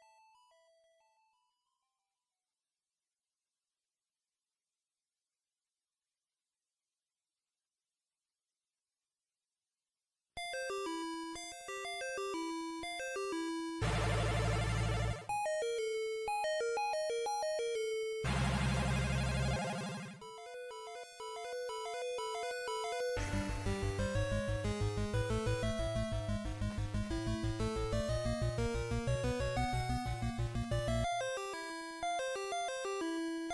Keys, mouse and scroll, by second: 2.7 click, 14.8 Tab, 14.8 KP_Divide, 17.0 KP_Divide, 18.6 Tab, 19.4 z, 20.7 z, 21.0-22.4 scroll up 3, 22.4-22.8 scroll up 2, 24.3 alt+right click, 27.5 alt+shift+right click, 32.3 shift+right click.